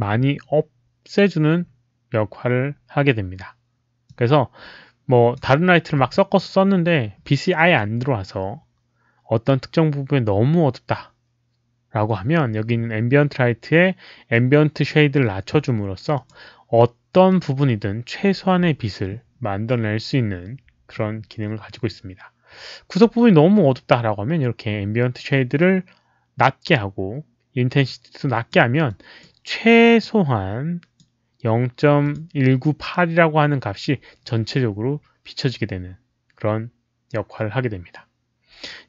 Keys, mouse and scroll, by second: 4.0-5.3 drag, 14.3-14.8 drag, 16.1 click, 17.2 click, 17.7 right click, 27.8 click, 28.8 click, 29.9-30.9 drag, 32.0 click.